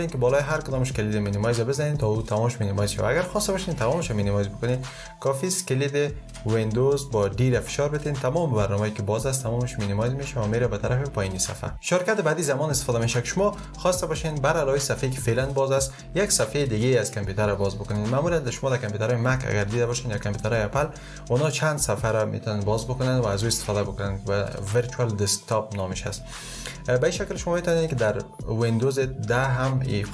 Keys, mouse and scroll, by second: 6.3 super+d.